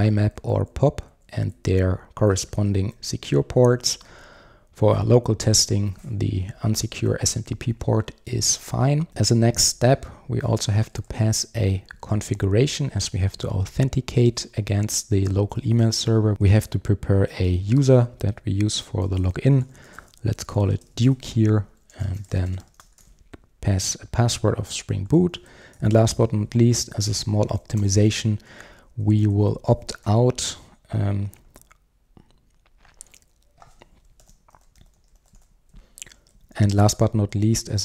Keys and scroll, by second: 4.0 Return, 10.5 Return, 16.3 super+z, 17.3 super+z, 17.5 Return, 26.7 Return, 34.2 super+z, 35.0 super+z, 37.2 super+z.